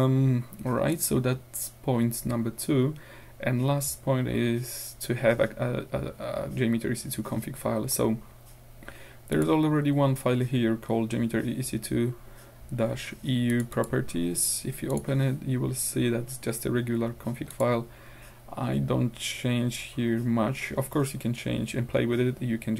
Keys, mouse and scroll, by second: 0.9 click, 3.9 middle click, 4.2 middle click, 7.5 middle click, 8.0 middle click, 9.3 click, 13.5 click, 14.9 click, 16.2-16.9 scroll up 2, 17.6 click, 20.4-20.9 scroll down 2.